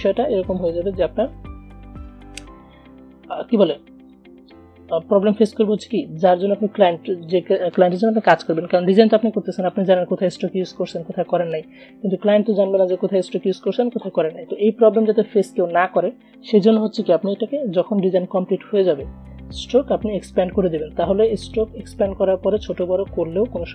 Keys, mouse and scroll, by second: 0.0 click, 4.3-9.9 drag, 9.9-21.6 drag.